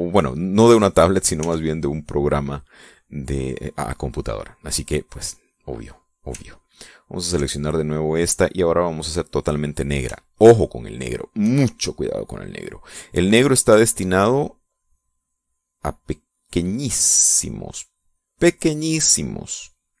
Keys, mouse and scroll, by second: 0.6 click, 1.8 ctrl+z, 7.1 ctrl+click, 9.3 click, 11.4 shift+click, 14.0-16.3 drag, 17.4-18.9 drag.